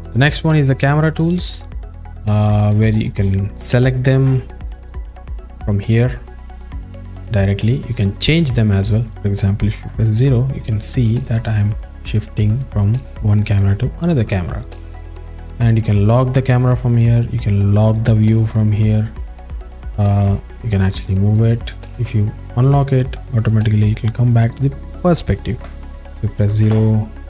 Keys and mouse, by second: 0.9 click, 1.6 alt+shift+middle click, 2.5 ctrl+middle click, 3.0 alt+shift+middle click, 3.4 alt+middle click, 3.9 ctrl+alt+middle click, 5.5-6.1 drag, 6.6-7.1 drag, 7.9-8.5 drag, 9.9 KP_0, 11.3-11.8 drag, 12.2-12.6 drag, 13.0 click, 14.2-14.6 drag, 16.0 click, 17.9 drag, 21.8 click, 23.2-24.5 alt+middle drag, 26.6 KP_0.